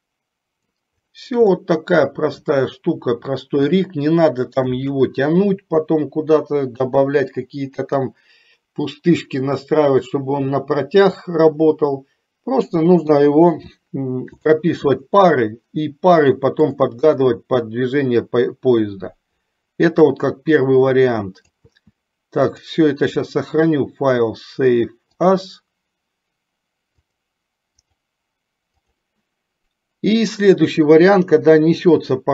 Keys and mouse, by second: 1.8-2.8 middle drag, 3.9-4.9 shift+middle drag, 13.1 KP_3, 16.9 click, 17.5-21.8 drag, 22.7-25.8 drag.